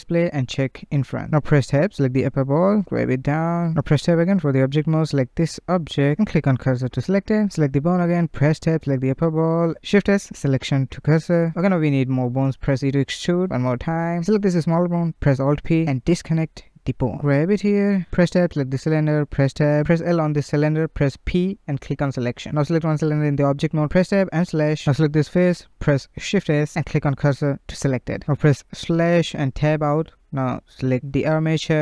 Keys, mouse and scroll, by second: 1.2 Tab, 2.4 g, 3.2-3.8 scroll up 1, 3.8 Tab, 4.1 click, 5.4 shift+s, 7.6 Tab, 7.7 click, 8.2 Tab, 9.3 shift+s, 10.9 scroll down 1, 11.2 shift+middle click, 12.0 e, 12.7 e, 14.3 click, 15.4 alt+p, 16.8 g, 17.2 Tab, 17.8 click, 18.3 Tab, 19.1 l, 19.8 p, 20.3 Tab, 20.8 click, 21.5 Tab, 22.6 /, 23.1 middle click, 23.8 click, 24.7 click, 26.5 shift+s, 29.6 /, 31.0 Tab, 31.4 click.